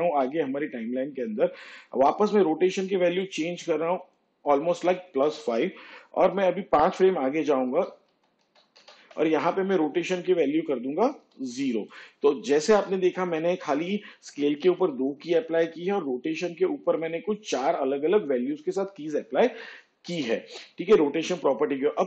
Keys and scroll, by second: 2.0 shift+Page_Down, 5.7 5, 9.2 ctrl+Right, 13.3 0.